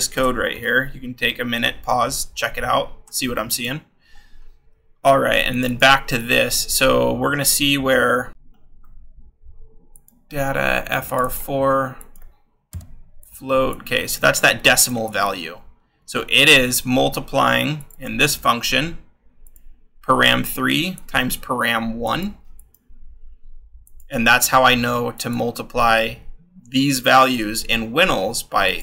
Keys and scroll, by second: 0.6-5.4 scroll, 8.3-10.2 scroll, 12.6 f, 15.0 ctrl+c.